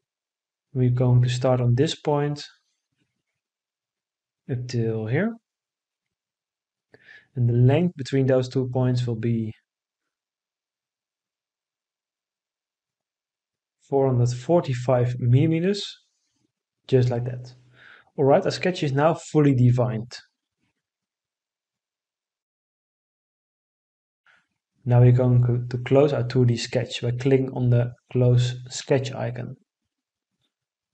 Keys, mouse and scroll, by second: 6.1-7.8 drag, 7.8-10.0 right drag, 12.5 4, 14.1 5, 15.4 Return.